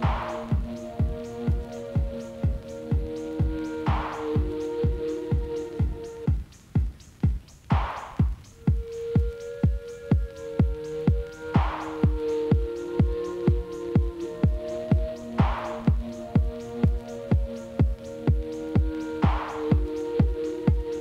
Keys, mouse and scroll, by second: 2.9 click, 3.2-4.7 drag, 4.9 click, 5.7 scroll down 2, 5.9-7.3 middle drag, 7.7 KP_Divide, 8.3-8.8 scroll up 2, 8.8-10.3 middle drag, 11.2 shift+z, 11.6-12.3 scroll up 3, 12.7 click, 13.3 click, 14.2 KP_Divide, 15.0 KP_Divide, 15.4 ctrl+z, 15.6 ctrl+z, 16.4 shift+z, 17.1 ctrl+z, 17.7 ctrl+z, 18.0 ctrl+z, 18.5 ctrl+z, 18.8 ctrl+z, 19.4 ctrl+shift+z, 19.7 ctrl+shift+z, 20.6 ctrl+shift+z, 20.9 ctrl+shift+z.